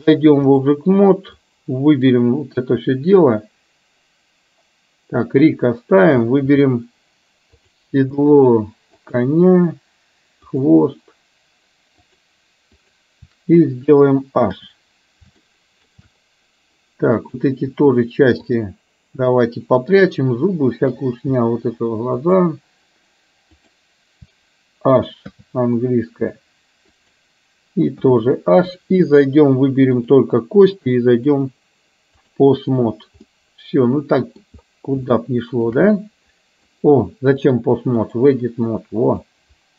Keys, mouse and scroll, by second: 1.4-2.2 drag, 5.2 click, 7.6 click, 9.1 shift+click, 10.5 shift+click, 12.9 shift+click, 14.5 h, 15.5-16.0 shift+middle drag, 17.2 click, 20.0 shift+click, 22.1 shift+click, 23.5 shift+click, 25.4 h, 28.0 h, 30.0 click, 31.2-32.4 drag, 33.2-34.5 middle drag, 35.1-35.6 shift+middle drag, 36.0-36.7 middle drag, 37.6 click, 38.9 middle click.